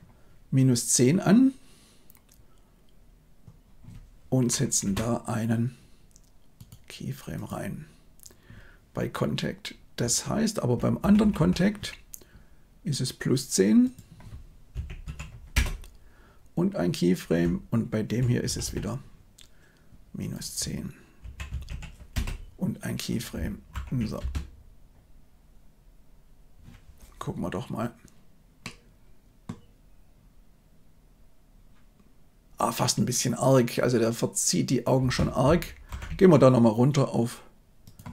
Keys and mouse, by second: 6.6 middle click, 9.9-10.6 Right, 10.9 Right, 11.1 Right, 11.3 Right, 13.8-15.5 drag, 17.3-18.1 Right, 18.4 Right, 18.6 Right, 20.3-22.1 drag, 23.6 shift+Left, 24.1 space, 28.5-29.4 middle drag, 34.9 space, 35.8 shift+Left, 37.8-38.1 drag.